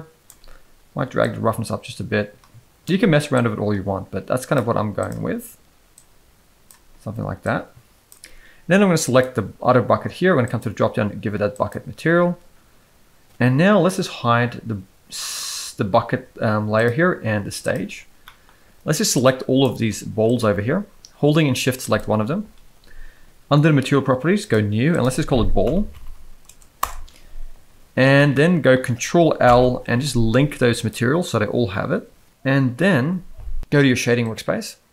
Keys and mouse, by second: 1.2-2.8 drag, 3.3-4.5 drag, 4.9 click, 9.0 click, 10.6-11.7 drag, 16.8 drag, 17.6 click, 18.2 middle drag, 19.1-19.6 drag, 19.7 z, 21.8 shift+click, 24.9-26.8 drag, 26.0 l, 28.3-28.6 middle drag, 29.4 ctrl+l.